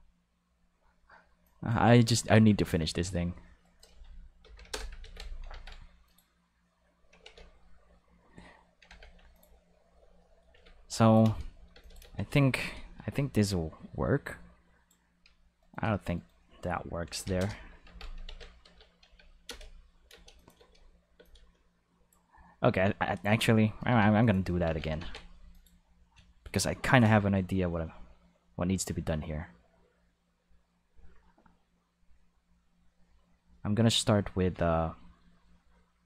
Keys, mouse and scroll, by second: 1.4 click, 2.4 Tab, 2.7 right click, 3.6 shift+right click, 4.4 ctrl+l, 4.6 x, 4.7 Return, 5.0 ctrl+s, 6.0 click, 7.2 ctrl+s, 8.9 ctrl+Tab, 9.3 click, 10.5 alt+a, 10.8 ctrl+shift+click, 11.2 ctrl+shift+space, 11.7 ctrl+shift+space, 11.8 ctrl+shift+click, 12.0 ctrl+shift+space, 12.5 ctrl+shift+space, 12.6-14.8 ctrl+shift+drag, 15.2 Tab, 15.6 right click, 17.1 ctrl+l, 17.2 ctrl+x, 18.2 ctrl+s, 18.6 Escape, 19.0 Tab, 19.4 space, 20.1 space, 20.3 click, 20.5 space, 21.1 space, 21.2-22.1 drag, 23.7 a, 24.0 x, 24.2 click, 24.6 ctrl+s, 25.5 click.